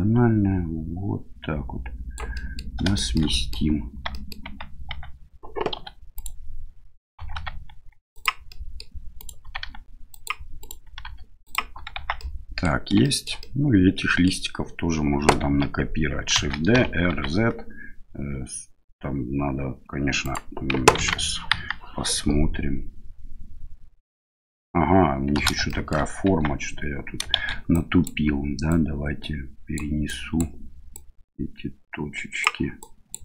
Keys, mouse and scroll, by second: 2.4 middle click, 3.0 shift+middle click, 3.4 middle click, 4.2 middle click, 4.4 Tab, 4.9 Tab, 5.8 1, 6.2 right click, 7.2 g, 8.5 middle click, 9.2 right click, 9.4 g, 10.6 right click, 10.8 g, 11.9 Tab, 12.2-12.6 middle drag, 13.0 shift+middle drag, 13.4-14.3 middle drag, 16.3 shift+d, 21.0 ctrl+z, 21.5 KP_1, 25.7 shift+middle click, 26.2 Tab, 27.3 shift+z, 27.8 click, 28.7-29.8 drag, 30.1 click, 30.9-32.4 drag, 32.8 click.